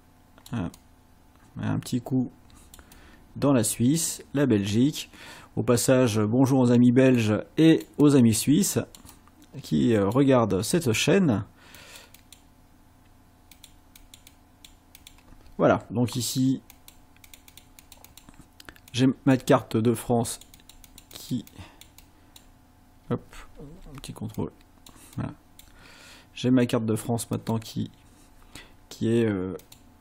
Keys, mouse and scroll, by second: 0.0 click, 0.8-2.9 drag, 5.1-8.0 drag, 10.3 click, 11.8 click, 13.6 click, 14.0 click, 15.0 click, 16.7 click, 17.3 click, 18.9 click, 20.3-22.5 drag, 23.7 ctrl+z, 24.3 ctrl+click, 25.2 click, 27.3 click, 29.6 click.